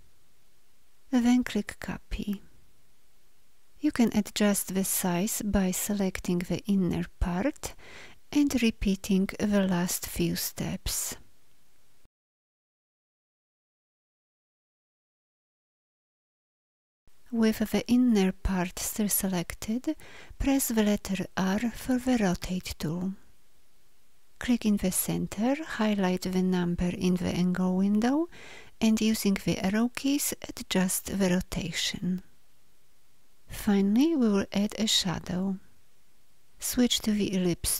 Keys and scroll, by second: 5.9 v, 8.6 s, 12.9 Up, 21.0 r, 28.8 Down, 28.8 Up, 37.0 l.